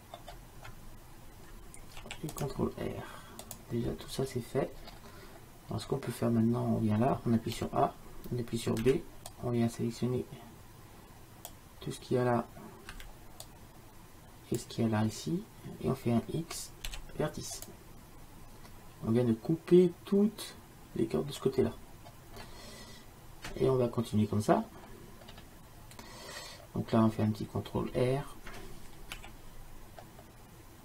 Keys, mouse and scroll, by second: 0.2-2.1 middle drag, 2.1 ctrl+r, 5.6-8.2 middle drag, 7.6 a, 8.9 b, 13.0 b, 17.0 x, 21.8-25.5 middle drag, 29.2 ctrl+r.